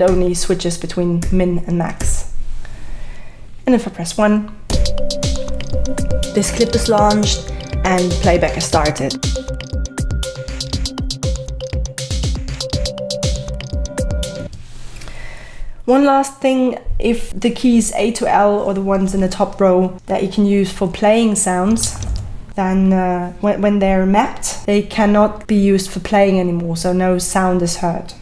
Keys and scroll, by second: 0.1 2, 1.2 2, 4.7 1, 11.8 typing, 14.4 space, 21.4-22.5 typing.